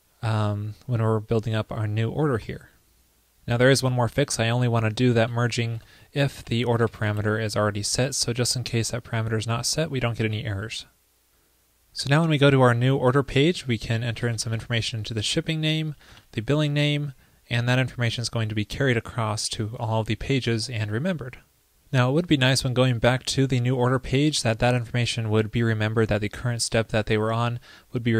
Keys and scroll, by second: 2.5 super+s, 6.3 ctrl+d, 6.4 ctrl+p, 10.3 super+s.